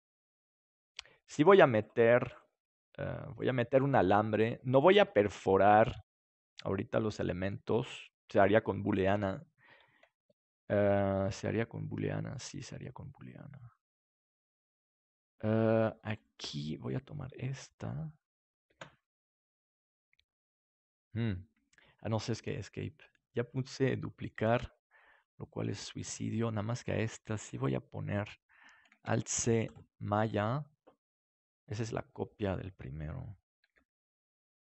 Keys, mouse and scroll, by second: 0.5 click, 0.7 right click, 0.9 g, 2.5 g, 3.8 click, 3.8 middle click, 3.8 right click, 5.8 ctrl+s, 9.1 KP_7, 17.0-18.4 right drag, 22.0 shift+d, 29.0 alt+c, 33.6 g.